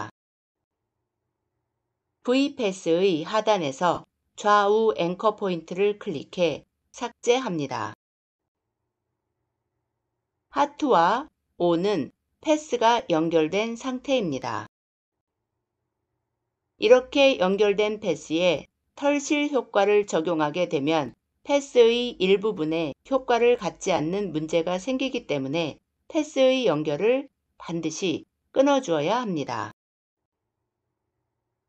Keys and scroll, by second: 0.0 -.